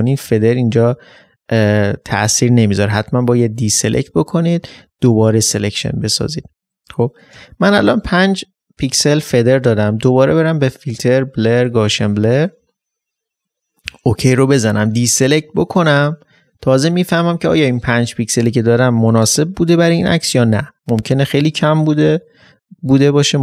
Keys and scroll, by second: 14.7 ctrl+d.